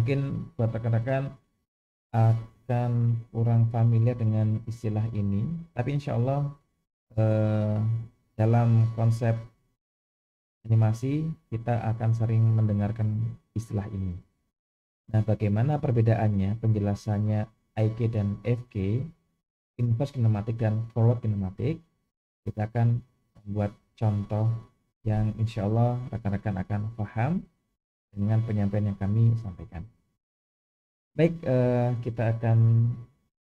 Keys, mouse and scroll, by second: 33.0 KP_1.